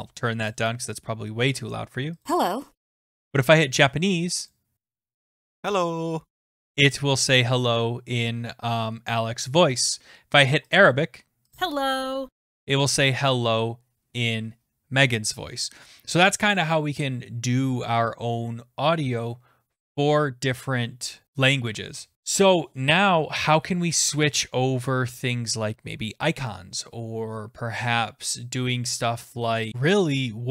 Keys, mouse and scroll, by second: 0.5 click, 2.3 click, 4.5 click, 10.8 click, 11.5 click, 29.7 click.